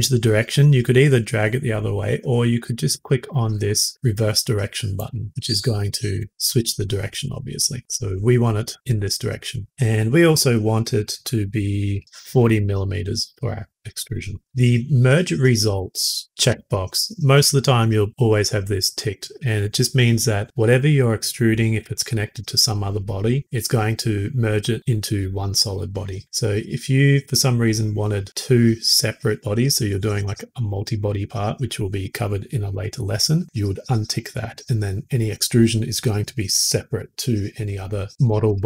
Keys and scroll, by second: 12.0 typing.